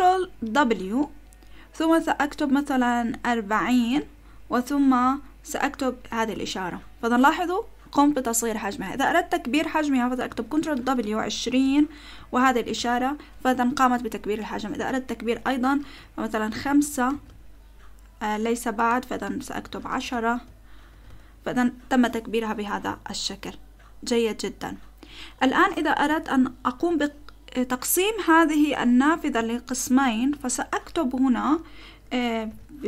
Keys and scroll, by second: 0.6 ctrl+w, 3.4-4.4 typing, 6.1 shift+,, 10.8 ctrl+w, 11.3 2, 11.6 0, 12.5 shift+., 15.8 ctrl+w, 16.5 5, 17.1 >, 19.2 ctrl+w, 19.6-20.9 typing, 32.5 shift+;.